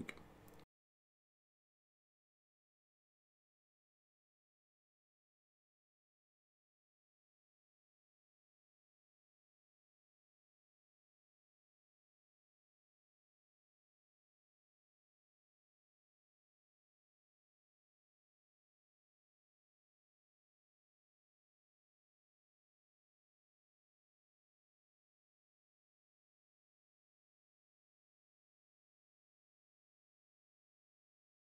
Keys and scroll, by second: 3.0 [, 9.7 space, 10.4 ], 12.9 space, 15.9 space, 18.4 space, 20.3 ctrl+0, 20.9 space, 22.4 space, 23.8 space.